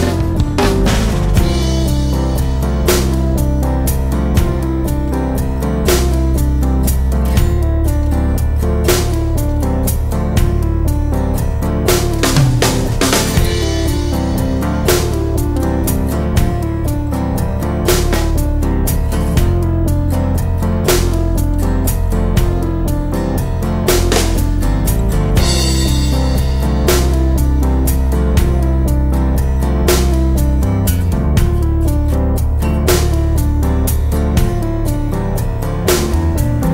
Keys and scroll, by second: 12.0 super+z.